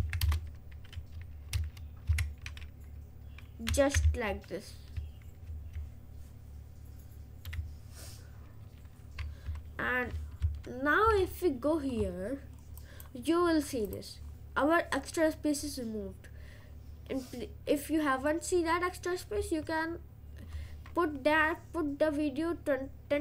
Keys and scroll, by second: 0.0 Up, 0.5 Return, 1.6 Return, 2.1 Right, 4.1 Down, 5.5 ctrl+s.